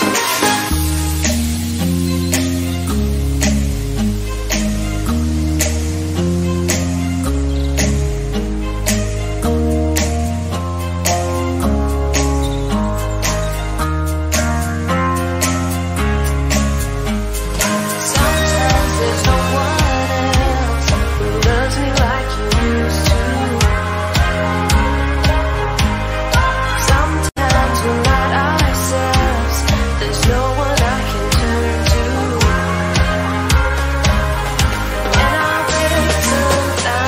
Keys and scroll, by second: 9.3 ctrl+z, 27.8 ctrl+z, 29.2 ctrl+z.